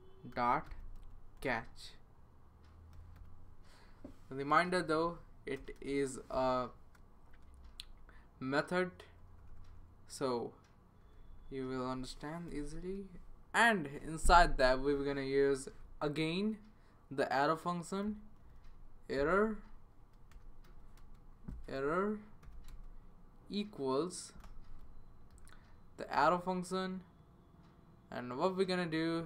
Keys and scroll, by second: 0.1-6.2 typing, 7.3 Down, 7.6 Right, 8.2 Right, 8.7 Right, 8.7 Right, 11.0 Right, 11.2 Right, 11.4 Right, 12.5 typing, 17.8-26.1 typing.